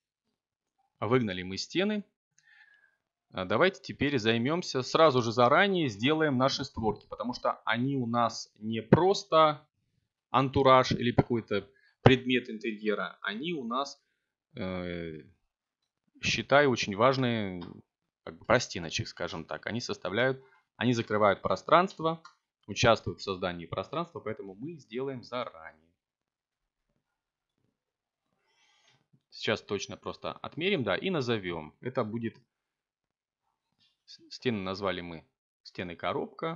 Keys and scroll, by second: 2.1 7, 3.7 z, 8.4 g, 14.2-15.8 typing, 17.8 BackSpace, 19.6-24.0 typing, 26.8 r, 27.1 f, 28.4 Return, 34.6-36.5 typing.